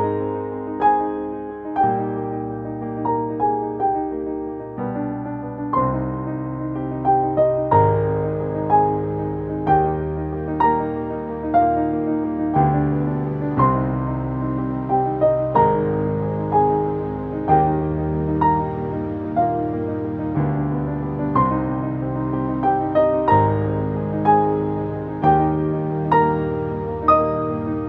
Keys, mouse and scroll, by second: 0.6 click, 1.0-3.0 alt+drag, 3.3-8.7 alt+drag, 8.7-11.5 drag, 11.5-13.2 drag, 13.2 click, 16.1-18.8 drag, 18.8 3, 19.5 Return, 20.3 click, 22.0 4, 22.8 Return, 24.9 click, 26.2 5, 26.8 Return, 27.7 click.